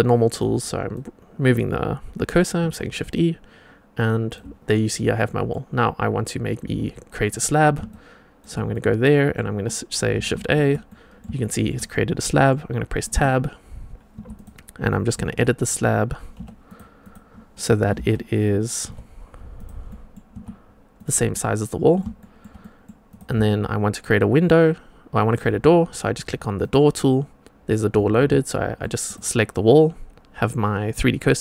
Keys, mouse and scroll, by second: 0.8-2.3 shift+right drag, 2.6 shift+e, 3.1 shift+right click, 5.2 middle click, 7.2 click, 7.8-8.3 shift+right drag, 8.6-9.3 middle drag, 10.3 shift+a, 10.8-11.1 middle drag, 11.3 shift+middle drag, 11.8-12.4 middle drag, 13.1 Tab, 14.1 2, 14.3 click, 15.1 g, 16.9 click, 17.8 g, 19.8 middle click, 20.0 click, 20.3 Tab, 20.9 click, 21.2-21.9 middle drag, 22.1 shift+middle drag, 22.5 middle click, 23.0 click, 23.4-25.3 shift+right drag, 26.5 click, 29.0 click.